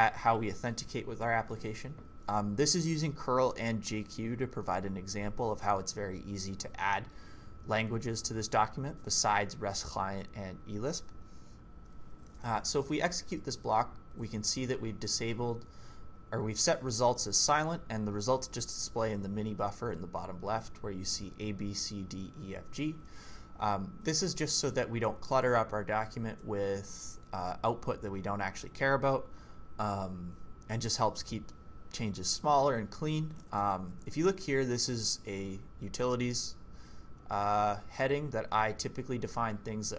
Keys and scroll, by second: 12.1-13.3 typing, 14.1 ctrl+c, 33.4-34.1 typing, 35.8 typing.